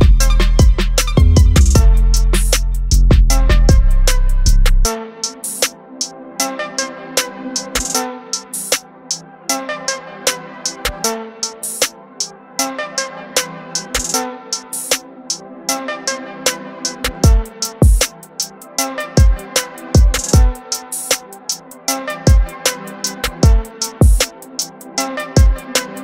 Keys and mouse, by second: 2.4 click, 9.8 click, 12.2 click, 19.6 click, 22.4 click.